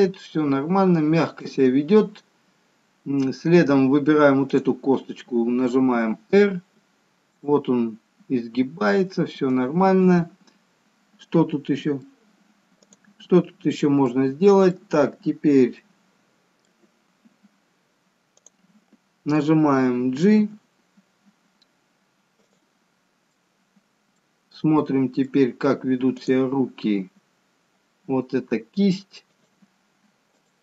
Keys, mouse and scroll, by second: 4.8 click, 6.1 r, 12.0 scroll up 2, 12.3 middle click, 14.1 click, 14.3 middle click, 16.1 middle click, 20.6 g, 23.6 middle click, 25.1 middle click, 26.5 click, 27.1 g.